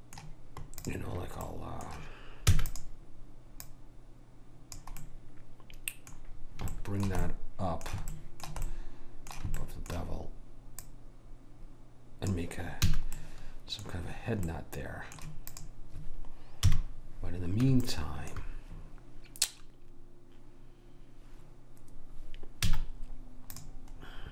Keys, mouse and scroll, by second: 0.9 click, 1.7-3.1 middle drag, 2.5 e, 3.7 click, 5.2 middle click, 10.8 click, 10.8 middle click, 12.9 a, 15.6 click, 16.7 KP_1, 22.7 z, 24.0-24.3 middle drag.